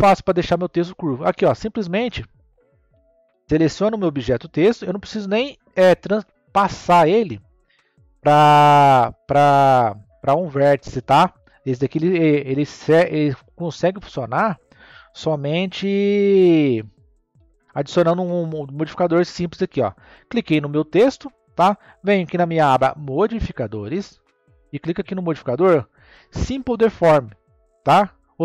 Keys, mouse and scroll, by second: 0.0-0.9 scroll down 3, 0.9-4.1 middle drag, 4.1 click, 13.5-14.5 scroll up 1, 14.5-17.0 middle drag, 17.0-18.0 scroll down 3, 18.0-20.1 scroll down 1, 23.9 click, 25.1-28.2 drag.